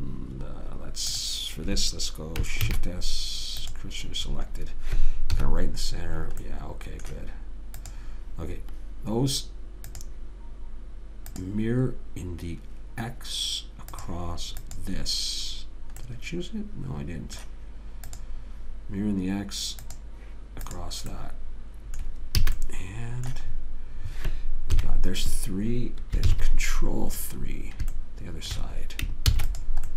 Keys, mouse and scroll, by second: 3.0 shift+s, 5.7 KP_1, 8.2 click, 14.3 click, 16.4 right click, 16.6-18.4 middle drag, 18.4 click, 21.5 right click, 21.8 middle click, 22.8 a, 25.1 KP_3, 26.6 ctrl+KP_3, 29.6 ctrl+s.